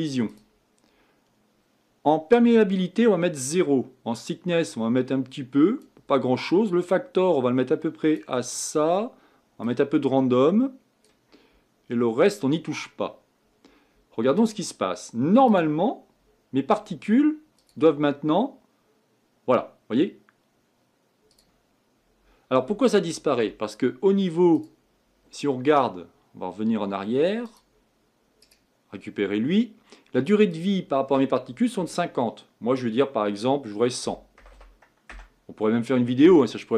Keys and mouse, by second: 19.1 click, 24.5-34.5 drag, 28.4-30.5 right drag, 34.5 KP_0.